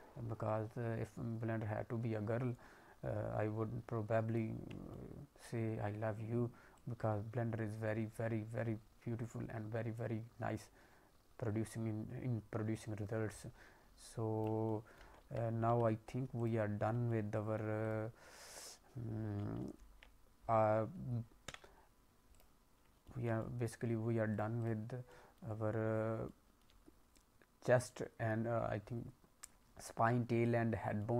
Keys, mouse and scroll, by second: 4.4 scroll down 1, 4.9 alt+middle click, 6.0 scroll up 1, 6.7 click, 14.6 alt+middle click, 15.1 a, 15.6 q, 17.0 alt+middle click, 17.8 click, 19.6 ctrl+Tab, 21.4 Delete, 23.0 alt+middle click, 23.4 middle click, 23.7-24.3 scroll up 2, 24.3 click, 24.5 click, 25.0 middle click, 26.2 middle click, 27.8 middle click.